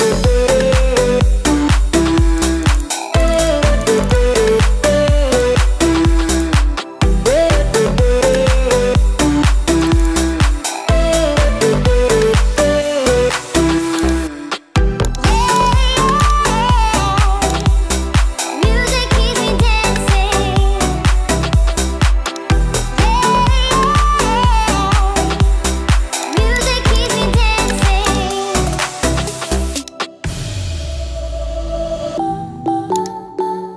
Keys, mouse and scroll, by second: 28.4 click.